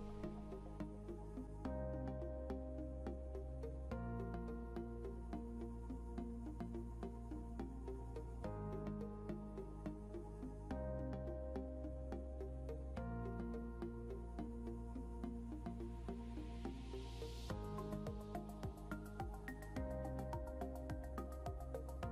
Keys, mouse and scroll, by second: 8.4 scroll up 1, 11.7 click.